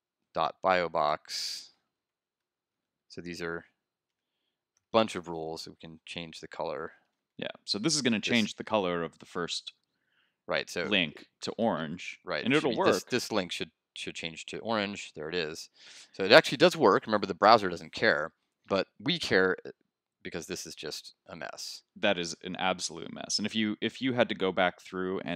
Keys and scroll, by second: 11.5 super+s, 11.9 super+Tab, 14.7 super+r, 16.5 super+Tab.